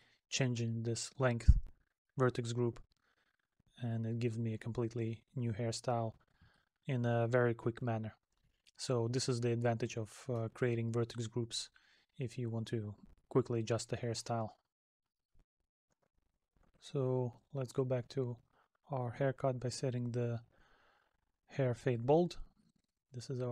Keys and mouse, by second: 5.5 middle click, 9.0 middle click, 23.0 middle click.